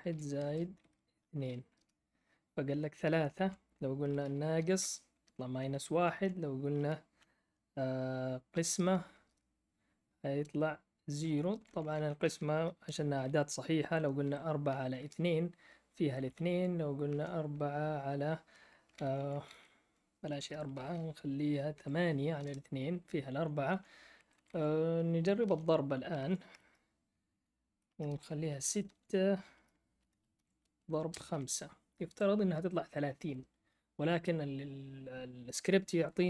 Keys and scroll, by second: 0.0-1.4 typing, 1.7 Return, 3.2 shift+Left, 3.3 shift+Left, 4.0-4.9 typing, 5.9 shift+Left, 6.1 shift+Left, 6.4-7.4 typing, 8.5 typing, 9.2 Return, 11.4 shift+Left, 11.7 shift+Left, 11.7-12.5 typing, 14.2 4, 16.4 Left, 17.0 Right, 18.5 typing, 19.0 Left, 19.2 Left, 19.3 Left, 19.4 Left, 20.3 BackSpace, 21.7 8, 22.4 Return, 23.7 Left, 23.7 Up, 24.2 Left, 24.3 Left, 24.4 Left, 25.2-31.3 typing, 28.7 Right, 28.8 Right, 33.1 Return.